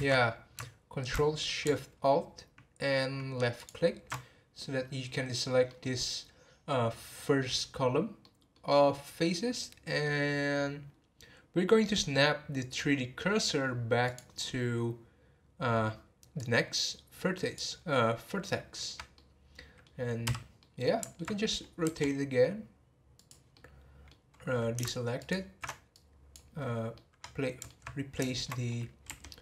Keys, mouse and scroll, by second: 3.6 ctrl+alt+shift+click, 5.6-10.9 middle drag, 10.9-11.5 scroll up 2, 14.0-19.1 drag, 19.1-20.2 middle drag, 20.2 n, 20.6-21.8 middle drag, 21.8 r, 23.5-25.2 middle drag, 25.2 ctrl+alt+shift+click, 25.9-26.9 drag, 26.9-29.0 middle drag, 29.0 r.